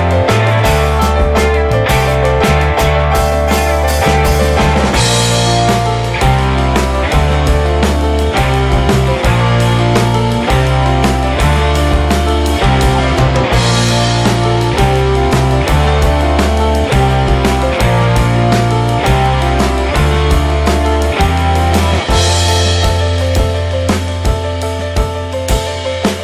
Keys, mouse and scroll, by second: 0.9 right click, 1.3 click, 1.6-2.3 middle drag, 2.3 click, 2.7 Delete, 3.1 click, 3.7 `, 4.0 middle drag, 4.1 scroll down 1, 4.2 middle drag, 4.5-4.9 scroll up 2, 4.5 middle click, 4.9 Tab, 5.0 middle click, 5.5-5.8 scroll down 2, 5.8 3, 6.0 click, 7.0 a, 7.5-7.8 scroll up 1, 7.8 click, 10.2 ctrl+t, 12.7 alt+j, 13.2 middle click, 13.6 Tab, 13.8 click, 14.1 middle click, 14.7 ctrl+a, 15.0 middle click, 15.3 `, 15.7 click, 16.0 middle click, 16.1-16.5 scroll up 2, 16.5 Tab, 16.6-17.0 scroll down 1, 17.0 Tab, 17.0-17.4 drag, 17.4 middle drag, 17.7 click, 17.8-18.6 right drag, 18.6 drag, 19.0-21.3 middle drag, 21.3 click, 21.8 click, 22.4-23.2 middle drag, 23.2-23.7 scroll up 2, 23.2 middle drag, 23.7 click, 24.0 `, 24.3 middle drag, 24.5 click.